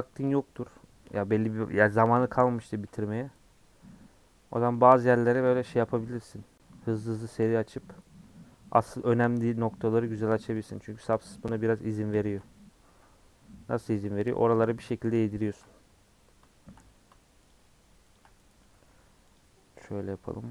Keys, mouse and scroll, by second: 2.9 ;, 3.6-7.3 middle drag, 10.2 alt+click, 10.9 a, 11.4 middle click, 11.7 scroll up 2, 12.2-14.0 shift+middle drag, 14.0 click, 15.2 ctrl+click, 16.5 shift+middle click, 16.8-17.5 scroll up 2, 17.5 shift+click, 18.1 shift+click, 18.6 a, 19.4 u, 20.4-20.5 scroll down 8.